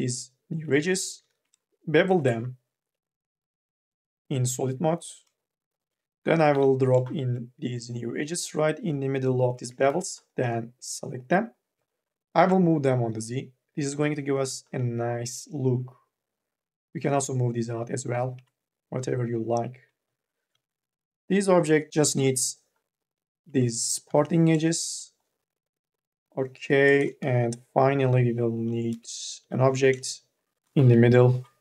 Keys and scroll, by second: 1.0 m, 6.3 k, 6.7 l, 9.6 2, 10.1 e, 14.0 ctrl+z, 14.1 q, 17.3 ctrl+z, 18.5 ctrl+z, 20.3 q, 21.9 k, 22.4 l, 23.9 q, 27.0-29.2 typing, 30.6 4.